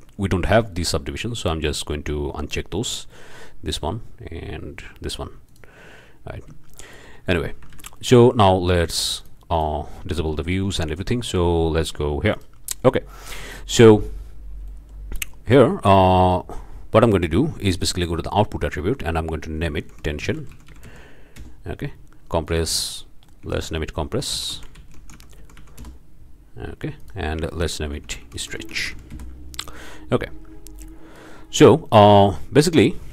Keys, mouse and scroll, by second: 3.7 drag, 5.5 click, 6.7-7.2 shift+drag, 7.3 shift+middle click, 7.7 alt+a, 8.0 alt+click, 9.2 drag, 9.5 click, 10.4-11.6 scroll up 2, 10.8-11.1 shift+drag, 11.8 shift+drag, 12.3 shift+drag, 12.8-13.4 shift+drag, 13.8-14.6 drag, 14.7-15.4 drag, 17.9 drag, 18.7 click, 19.8-20.9 typing, 21.4 Return, 22.5 click, 23.4-25.4 typing, 25.8 Return, 27.0 click, 28.0-28.9 typing, 29.1 Return, 30.8 click, 31.4 middle click, 31.4 scroll up 1, 31.9-32.4 drag, 32.5 scroll up 1, 32.8-33.1 shift+drag.